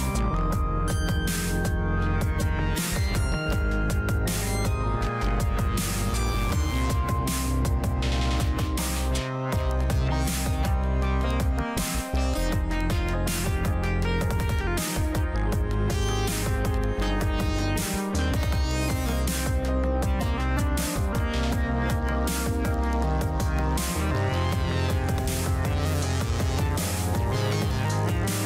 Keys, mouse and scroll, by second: 12.3-17.3 middle drag, 17.7 scroll down 1, 18.8-21.9 middle drag, 21.9 scroll up 1, 22.6-26.2 drag.